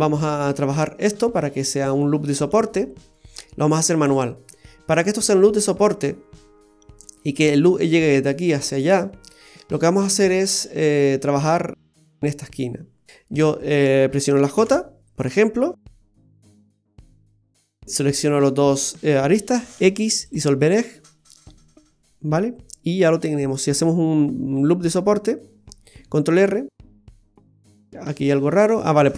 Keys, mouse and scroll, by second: 0.2 shift+middle click, 0.9-1.3 scroll up 2, 1.6 shift+middle click, 13.0 right click, 13.5 shift+right click, 14.6 j, 16.3 click, 17.1 click, 17.1 right click, 18.2 shift+right click, 19.8 x, 20.9-21.3 scroll down 2, 21.3 middle click, 26.0 ctrl+r.